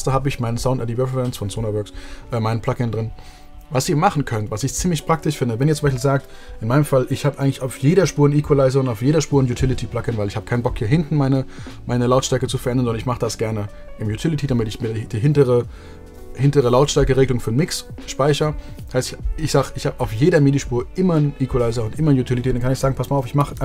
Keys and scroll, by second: 23.0 super+f, 23.4-23.6 typing.